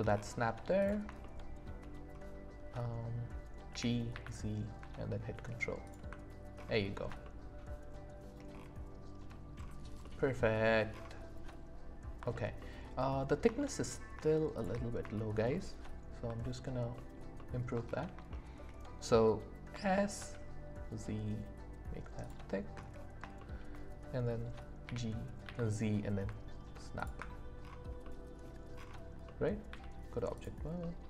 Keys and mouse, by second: 1.2-1.6 shift+middle drag, 3.7 g, 4.1 z, 7.2-8.2 shift+middle drag, 10.0 middle click, 13.6 shift+click, 14.6 shift+click, 15.1 shift+middle click, 15.5 middle click, 18.3 shift+click, 19.7 s, 20.1 z, 23.4 shift+drag, 24.8 g, 25.4 z, 26.9 ctrl+click, 28.0 middle click, 29.2 middle click, 29.7 z, 30.3 click, 30.8 middle click.